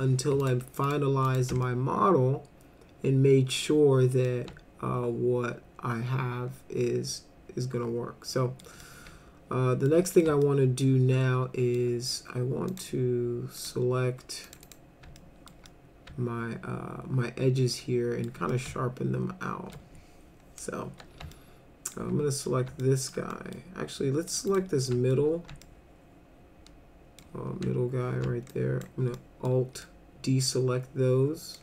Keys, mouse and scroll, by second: 0.4 ctrl+click, 0.9 ctrl+click, 1.3 ctrl+click, 1.7-3.6 alt+middle drag, 4.3-8.6 alt+middle drag, 8.8-9.9 alt+middle drag, 10.0 middle click, 10.4-11.8 alt+middle drag, 12.7 click, 13.6 click, 14.5 click, 14.6 click, 15.2 alt+middle click, 15.7-18.3 middle drag, 18.5-19.8 alt+middle drag, 21.4 alt+middle click, 22.8 alt+middle click, 23.3 middle click, 24.3 click, 24.5 click, 24.9 alt+middle click, 25.6-27.2 alt+middle drag, 28.5 alt+click, 29.2 alt+middle click, 29.8-31.6 alt+middle drag.